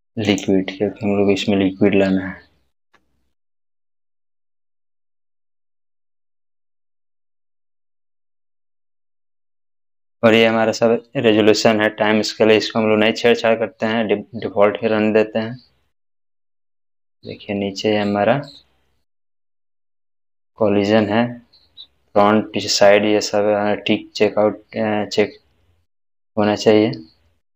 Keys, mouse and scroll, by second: 4.1 click, 4.1-5.6 scroll down 1, 15.4 scroll down 1, 26.3-26.9 scroll down 1.